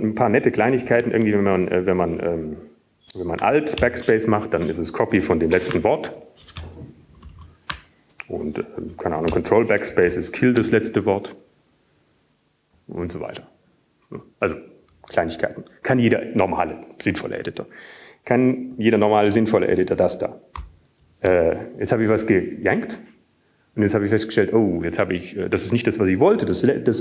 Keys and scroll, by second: 0.2 Down, 0.2 alt+w, 1.7 ctrl+y, 2.3 1, 3.9 Down, 3.9 Up, 3.9-4.9 Left, 7.5 alt+BackSpace, 8.8 ctrl+y, 9.8 ctrl+y, 10.6 ctrl+y, 12.4 ctrl+BackSpace, 13.4 ctrl+y, 17.7 Down, 18.3 Down, 23.4 ctrl+y.